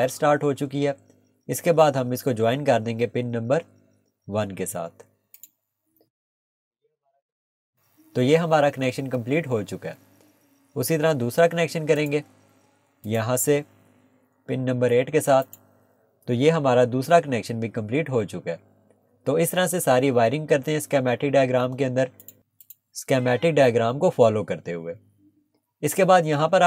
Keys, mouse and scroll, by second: 0.9 scroll down 1, 4.3 scroll up 1, 5.4 click, 6.2 Escape, 6.6 scroll down 1, 12.0 click, 15.4 click, 16.3 Escape, 18.4 scroll down 1, 22.2 click.